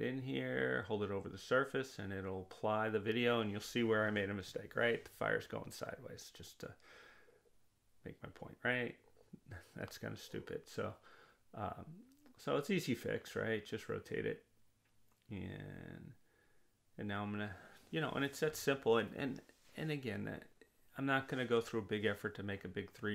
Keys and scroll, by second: 17.8 0, 18.6 Return.